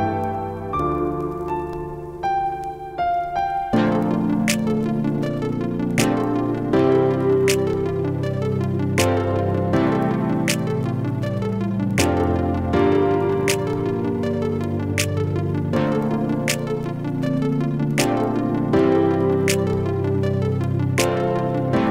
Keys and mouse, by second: 1.5-2.0 typing, 4.9 click, 7.3 click, 9.7-12.9 drag, 15.4 click, 20.9 click.